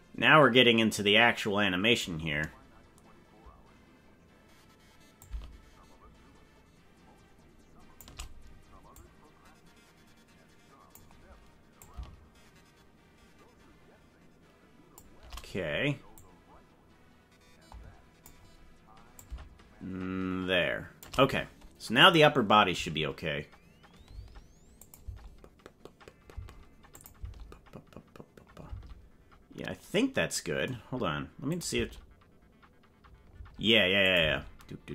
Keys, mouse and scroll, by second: 0.7-2.0 drag, 5.2-8.0 shift+drag, 8.9-11.0 drag, 11.8-15.1 shift+drag, 16.1-18.2 drag, 19.1-21.0 shift+drag, 22.0 click, 22.7 space, 24.0 space, 24.8 click, 25.0 space, 26.9 click, 27.1 space, 28.7 space, 31.5 click, 31.7 space, 33.3 space, 34.0 click, 34.2 space.